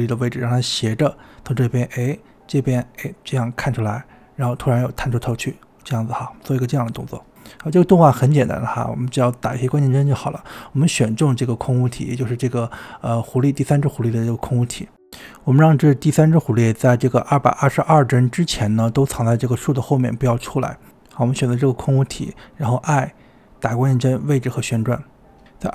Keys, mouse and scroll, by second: 0.0-0.2 typing, 8.5-11.0 drag, 12.2-12.9 scroll up 2, 13.9-16.0 drag, 22.5 i, 25.1-25.7 drag.